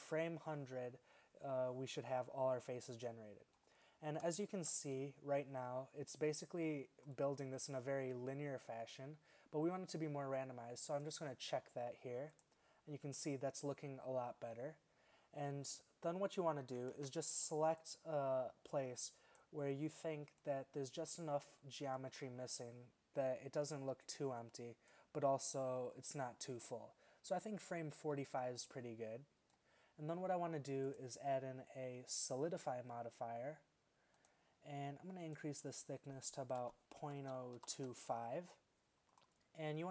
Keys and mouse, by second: 4.5 shift+Left, 11.7-14.3 drag, 17.0 alt+a, 20.9-21.7 middle drag, 24.0 click, 28.2-30.9 middle drag.